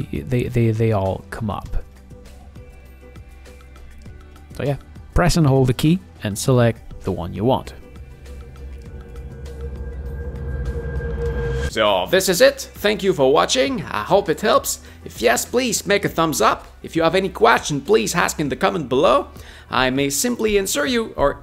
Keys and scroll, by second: 3.3 4, 6.7 u, 9.1 5.